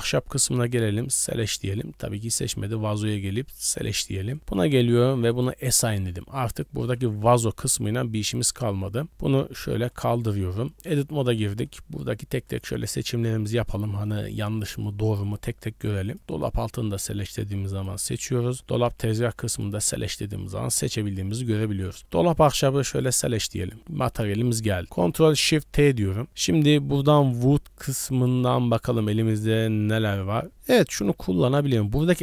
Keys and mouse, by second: 0.7 click, 1.2 click, 3.7-5.6 drag, 6.5 click, 7.3 Tab, 9.9 click, 10.7 Tab, 11.6 click, 13.1 middle click, 13.9 shift+middle click, 14.2 middle click, 14.7 shift+middle click, 15.2 click, 16.1 click, 16.4 click, 17.7 click, 20.8 click, 21.8 click, 22.9 click, 23.6 click, 24.0 middle click, 25.0 ctrl+shift+t.